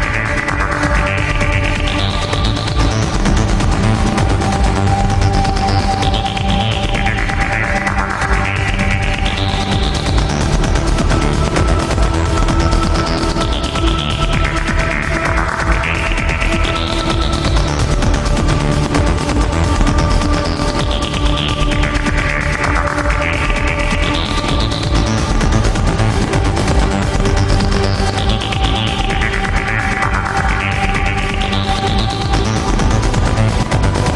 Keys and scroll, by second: 29.9 alt+space, 30.3 alt+space, 31.2 alt+space.